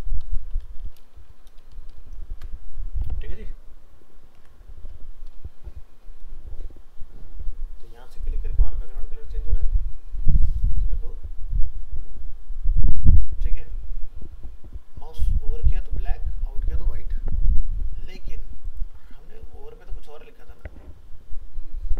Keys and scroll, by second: 2.0 ctrl+s, 4.4 alt+Tab.